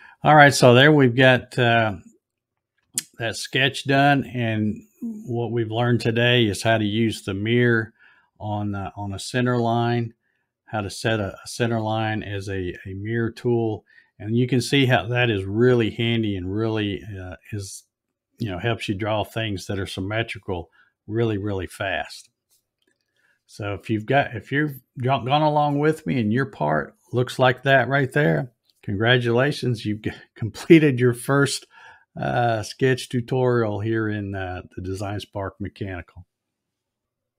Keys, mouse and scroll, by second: 24.6-25.7 middle drag.